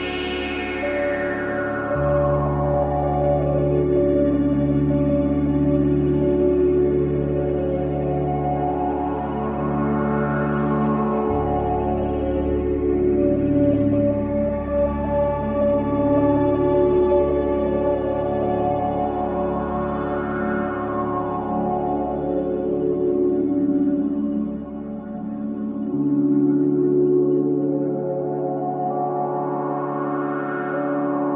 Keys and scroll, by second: 7.1 F4, 7.7 Escape, 10.2 shift+Page_Up, 11.1 F2, 15.7 ctrl+g, 16.5 c, 16.8 Escape, 20.2 b, 20.5 Escape, 25.4 space.